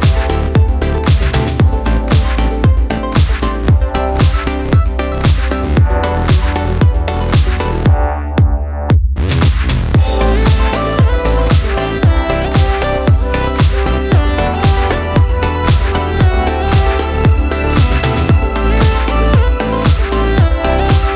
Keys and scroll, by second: 2.3 Return.